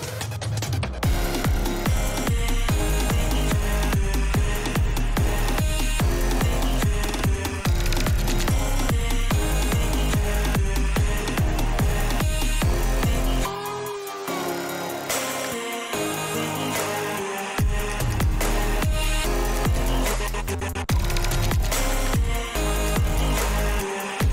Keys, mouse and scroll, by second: 1.3 shift+middle click, 2.1 s, 6.5 shift+middle click, 7.3 g, 9.4 s, 13.6 click, 16.0 Tab, 17.6 middle click, 19.3 middle click, 19.9 middle click, 20.8 middle click, 21.2 middle click, 22.5 middle click, 23.0 click, 23.3 click, 23.8 right click, 24.1 middle click.